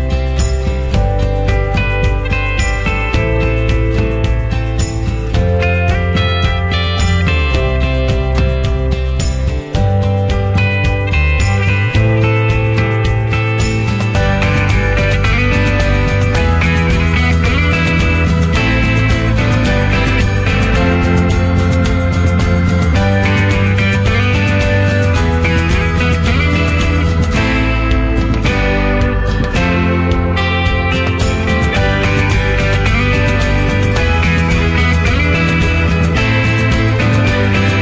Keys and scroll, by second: 6.3 ctrl+z, 10.5 ctrl+z.